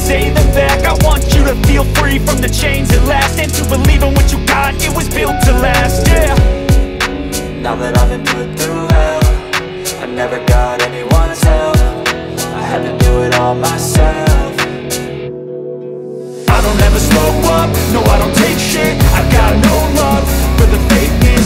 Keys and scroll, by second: 2.2 F3, 5.0 shift+F2, 5.4 Escape, 7.0 t, 7.4 Escape, 10.7 shift+F2, 11.0 Escape, 14.3 t, 17.2 Escape.